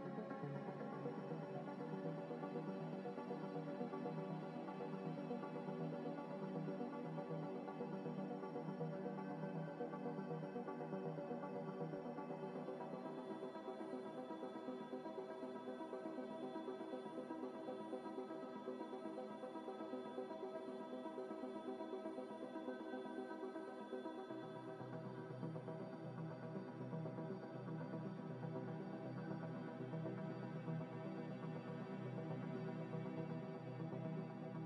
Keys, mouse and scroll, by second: 0.0-0.2 typing, 1.8 y, 2.9 Tab, 3.7 Tab, 4.2 g, 4.2 z, 4.5 y, 6.2 Tab, 6.4 middle click, 7.3 scroll down 1, 7.7 middle click, 8.5 right click, 9.5 middle click, 10.0 scroll down 1, 10.2 middle click, 10.6 z, 11.1 middle click, 11.2 scroll up 1, 11.6 scroll down 2, 11.9 ctrl+z, 12.0 ctrl+z, 13.6 ctrl+z, 13.6 scroll down 1, 13.9 middle click, 14.2 scroll down 1, 14.4 middle click, 15.5-15.8 scroll down 1, 15.8 scroll up 1, 16.1 scroll down 1, 16.4 g, 16.5 z, 17.8 g, 17.9 z, 18.2 double click, 22.6 g, 22.7 z, 26.0 double click, 28.7-29.1 scroll down 1, 30.2 shift+d, 31.2 g, 33.5 x.